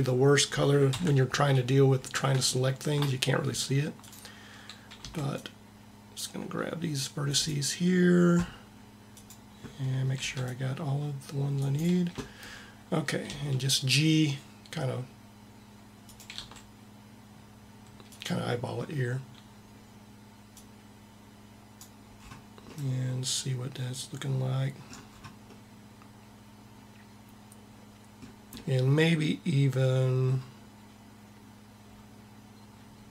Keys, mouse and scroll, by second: 0.7 ctrl+KP_7, 4.9 c, 8.9-10.2 drag, 10.2 c, 13.1 g, 16.2 r, 20.4-21.7 drag, 21.9 middle click.